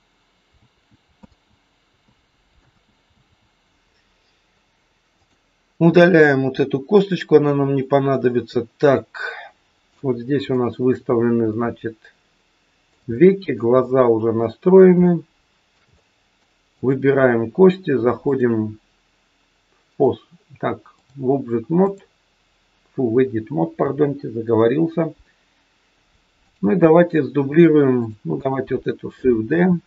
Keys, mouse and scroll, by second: 0.5 ctrl+z, 1.2 ctrl+z, 2.0 ctrl+z, 2.5 ctrl+z, 3.0 ctrl+z, 5.2 click, 6.5 Delete, 7.9 scroll up 2, 8.9 middle click, 10.5 shift+middle click, 11.0-11.5 scroll up 2, 11.5 middle click, 13.2 middle click, 13.6-14.2 scroll down 4, 14.4 middle click, 15.0 shift+middle click, 16.0 middle click, 16.8 click, 18.3 click, 23.8 KP_3, 24.2-24.8 scroll up 2, 24.8-25.9 scroll down 2, 26.4 click, 28.0 click, 29.5 shift+d.